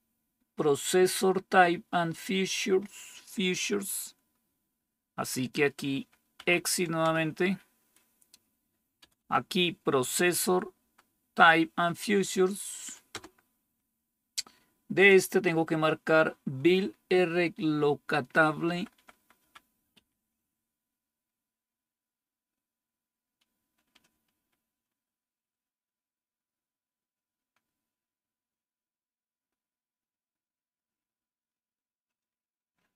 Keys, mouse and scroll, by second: 6.3 Right, 6.9 Return, 10.4 Down, 10.9 Down, 13.0 Return, 18.6 Down, 18.8 Down, 19.1 Down, 20.1 Up, 23.6 Down, 24.0 Down, 24.3 Down, 24.6 Down, 27.4 Down, 28.3 Down, 28.7 Down, 30.7 Down, 31.0 Down, 31.5 Down, 31.5 Down, 32.0 Down, 32.3 Down, 32.8 Down.